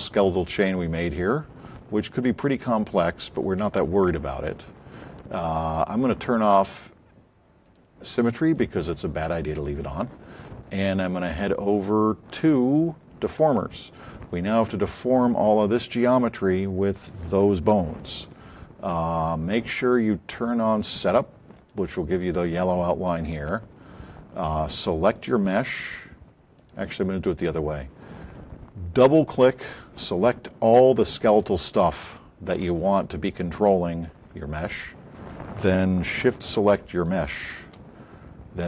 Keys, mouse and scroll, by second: 0.9 click, 1.5 click, 7.6 click, 8.4 click, 31.2 click, 36.9 shift+click.